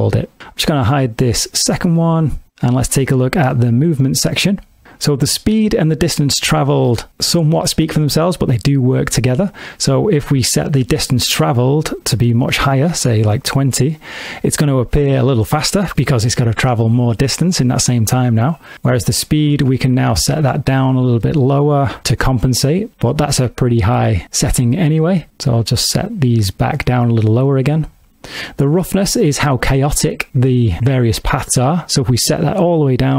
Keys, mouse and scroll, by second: 0.1 click, 1.8 click, 2.6 click, 3.5 middle click, 9.9 click, 18.9 click, 23.0 click, 32.8 click.